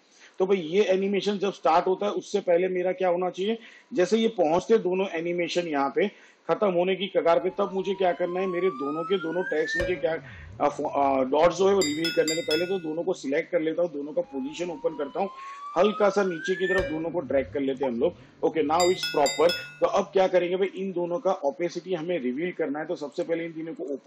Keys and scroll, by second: 14.0 p.